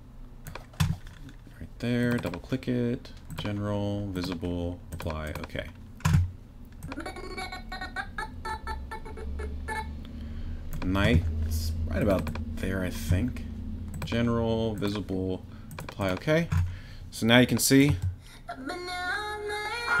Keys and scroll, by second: 17.9 space.